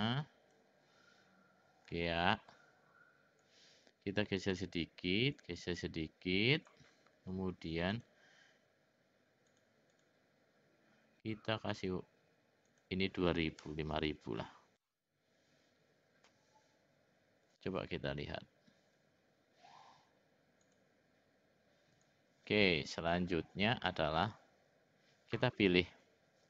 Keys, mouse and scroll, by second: 2.0 middle click, 3.5-4.6 drag, 5.4-6.7 drag, 8.0-9.6 drag, 10.0 click, 11.7-16.0 drag, 17.5 click, 20.6 click, 21.9 click, 24.2 click.